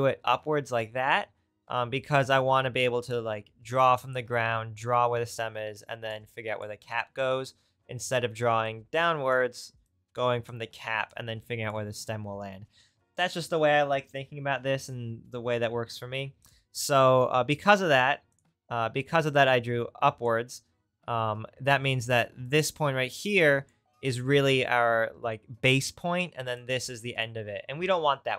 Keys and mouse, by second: 16.4-18.3 drag, 18.3 click.